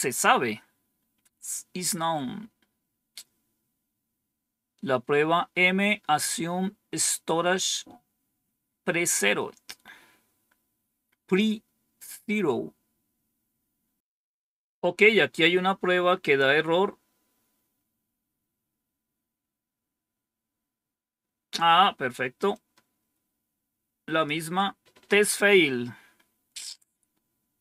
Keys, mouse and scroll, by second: 10.6-11.3 scroll down 1, 22.4-24.2 drag.